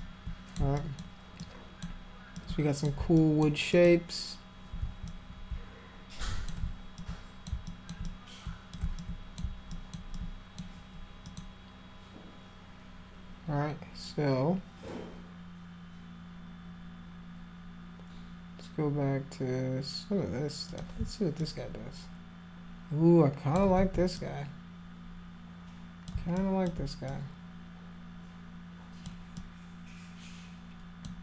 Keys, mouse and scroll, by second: 0.0 alt+click, 0.8 alt+click, 1.4 alt+click, 2.4 alt+click, 3.2 alt+click, 3.7 alt+click, 5.1-6.5 drag, 7.0 alt+click, 7.7 alt+click, 8.0 click, 9.0 alt+click, 9.7 alt+click, 10.2 alt+click, 11.3 click, 20.7 click, 21.4-23.6 alt+drag, 23.8 ctrl+z, 24.2-26.1 drag, 26.4 alt+click, 27.1-29.1 drag, 29.4-31.1 drag.